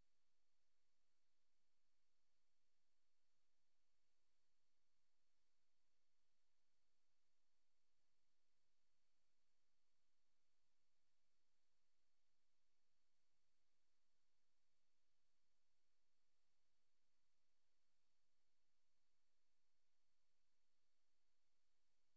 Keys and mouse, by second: 1.1 click, 2.9 click, 4.2 click, 5.3 click, 7.2 click, 9.7 ctrl+z, 10.6 click, 11.8 click, 12.8 click, 13.5 click, 15.3 ctrl+z, 16.3 click, 17.0 click, 17.8 click.